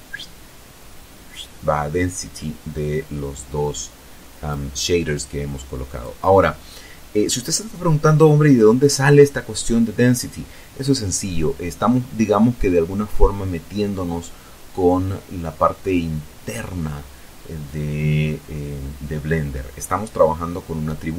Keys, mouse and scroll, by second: 2.5-4.2 drag.